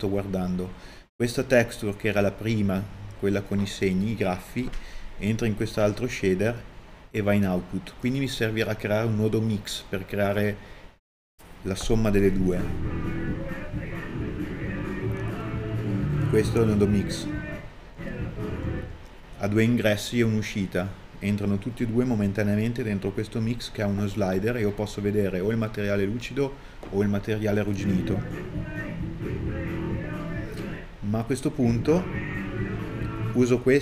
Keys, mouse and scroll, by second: 12.8 click, 14.0 click, 17.2 click, 27.7 click, 28.7 click, 30.0 ctrl+shift+click, 30.3 click, 33.1-33.8 drag.